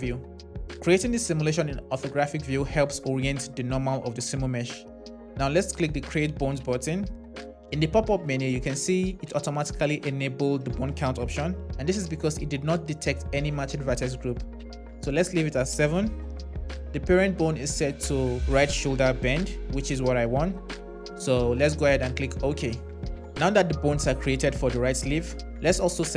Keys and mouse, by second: 6.3-23.5 drag, 25.9 click.